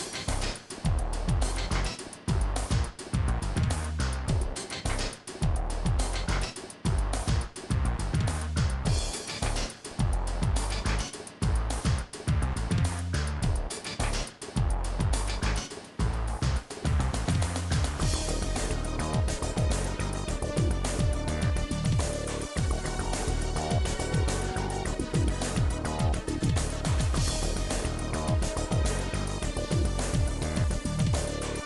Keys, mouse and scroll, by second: 0.0-6.1 typing, 0.0 shift+click, 0.6 click, 1.0 shift+click, 1.4 shift+click, 1.8 shift+click, 2.3 shift+click, 2.7 middle click, 3.3 middle click, 3.5 click, 4.3 click, 4.9 shift+click, 5.3 click, 5.8 shift+click, 6.2 middle click, 6.8 shift+click, 7.2-15.8 typing, 7.3 shift+click, 7.9 shift+click, 8.1 shift+click, 8.7 shift+click, 9.3 shift+click, 9.8 shift+click, 10.2 shift+click, 10.6 shift+click, 11.2 shift+click, 11.6 shift+click, 12.1 shift+click, 12.7 shift+click, 13.1 shift+click, 13.5 shift+click, 14.0 middle click, 14.5 shift+click, 14.9 click, 15.6 shift+click, 16.0 shift+click, 17.0-21.6 typing, 17.1 shift+click, 17.5 middle click, 17.9 middle click, 18.1 shift+click, 18.6 shift+click, 19.2 shift+click, 19.6 click, 20.2 shift+click, 20.7 middle click, 21.2 click, 21.7 shift+click, 26.5 middle click, 27.1 shift+click, 27.4 middle click, 27.7 shift+click, 28.1 middle click, 28.3 shift+click, 28.5 middle click, 29.9 middle click, 30.9 click, 31.1 middle click.